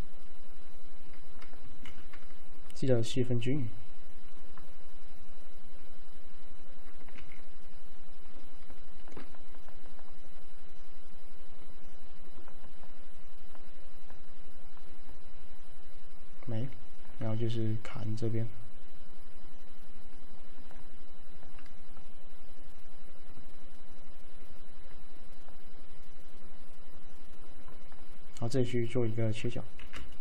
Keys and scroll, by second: 1.9 v, 7.2 ctrl+z, 29.9 f.